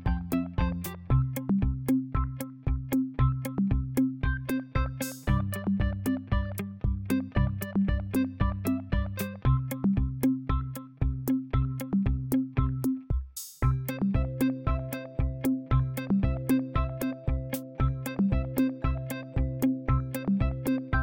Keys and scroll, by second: 10.4 KP_5, 10.9 KP_0, 11.9 space, 12.7 shift+5, 13.9-15.6 typing.